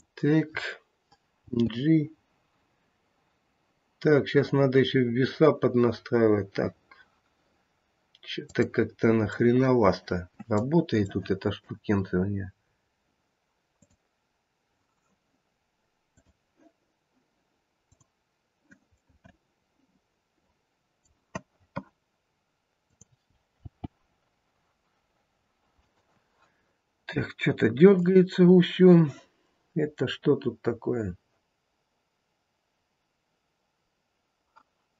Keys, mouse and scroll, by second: 1.4 g, 9.3 middle click, 10.0 middle click, 11.1 shift+middle click, 11.2 shift+middle click, 12.6 scroll up 1, 13.8 click, 16.0 click, 18.9 middle click, 22.8 click, 23.6 g, 27.0 scroll down 1, 27.9 click.